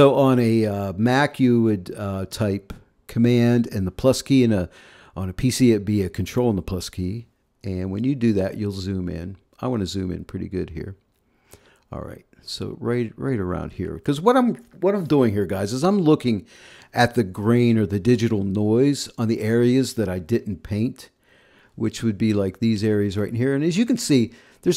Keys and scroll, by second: 8.3 super++, 12.9 super++, 16.0 space, 21.3 v.